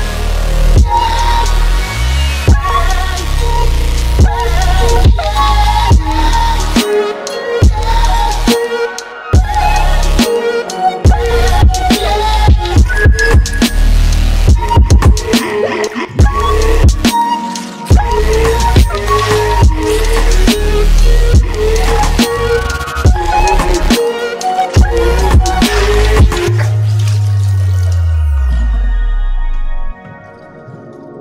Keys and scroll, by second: 8.5 ctrl+z.